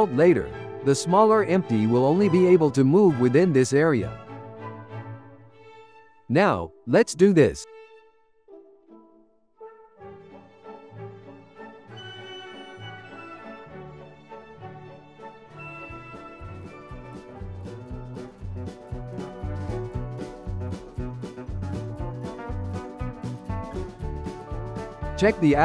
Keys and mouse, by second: 0.0 click, 8.5-12.7 drag, 12.8-15.1 drag, 15.1-16.6 shift+middle drag, 16.6 g, 17.7 shift+middle click, 17.9 g, 20.9-24.2 drag, 24.3-25.6 drag.